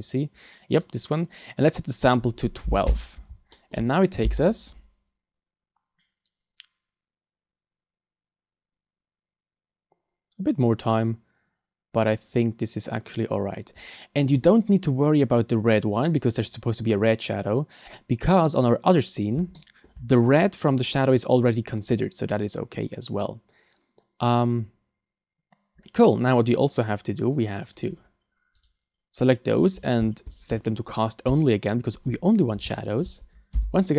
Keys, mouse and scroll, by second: 0.1 right click, 0.7 right click, 1.9 click, 3.5 shift+middle click, 27.7 click, 28.6 right click, 29.5-30.7 scroll down 14, 31.3 click, 32.7 shift+middle click.